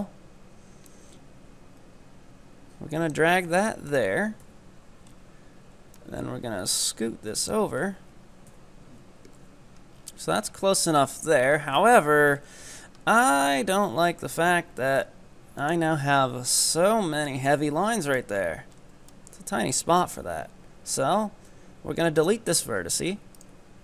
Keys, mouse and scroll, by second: 4.4 KP_1, 5.1-6.0 scroll up 4, 6.0-7.9 drag, 7.9-8.5 scroll down 5, 8.5 KP_7, 9.4 z, 9.9 scroll down 6, 10.5 shift+middle click, 11.1-12.3 scroll up 6, 12.3-13.3 scroll up 10, 13.3 right click, 14.1 scroll down 2, 14.4 g, 15.9-16.6 scroll down 10, 16.6 shift+middle click, 17.6 middle click, 17.6-18.0 scroll down 3, 18.2 shift+middle click, 18.4-19.2 scroll up 8, 19.2-21.0 shift+middle drag, 21.0 x, 23.4-23.8 right drag.